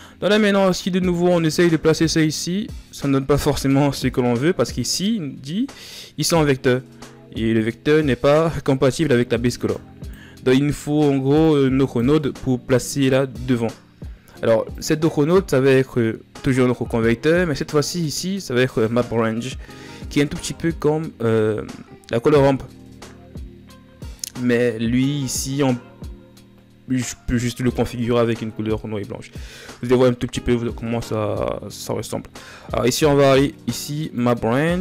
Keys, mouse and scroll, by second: 1.1-2.1 drag, 13.0 click, 15.8-33.9 drag.